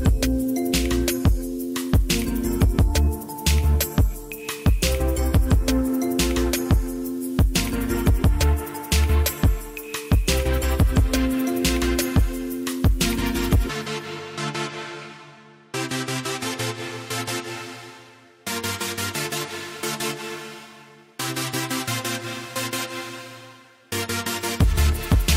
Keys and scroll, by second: 3.4 shift+a, 4.4 z, 8.9 Tab, 10.0 ctrl+r, 10.7 Escape, 17.3 g, 19.1 ctrl+r, 20.4 ctrl+r, 21.3 Tab.